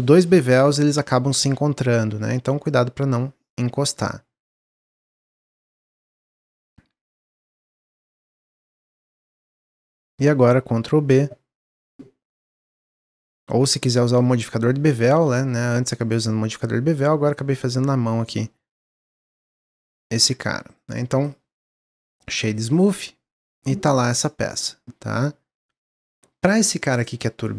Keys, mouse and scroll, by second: 1.8-4.9 drag, 5.6-5.9 scroll down 1, 5.9-6.5 middle drag, 6.5 Tab, 6.9 Tab, 7.2 click, 8.0 3, 8.2 click, 8.5 middle click, 9.2 shift+click, 9.7 middle click, 10.4 ctrl+b, 12.6-15.4 middle drag, 15.4-20.3 shift+drag, 20.3 Tab, 20.6-20.9 scroll down 1, 20.9 middle click, 21.1 click, 21.6 click, 22.0-22.7 right drag, 22.7 click, 22.9-25.7 middle drag, 25.7 click, 26.9 middle click, 27.3 Tab.